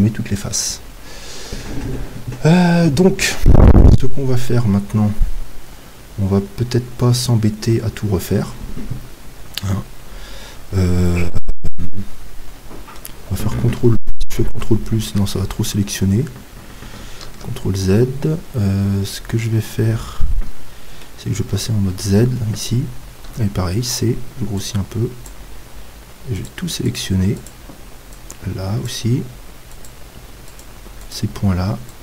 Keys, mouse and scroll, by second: 3.9-6.5 middle drag, 17.3 ctrl+z, 18.0-21.4 middle drag, 21.5 z, 23.3 c.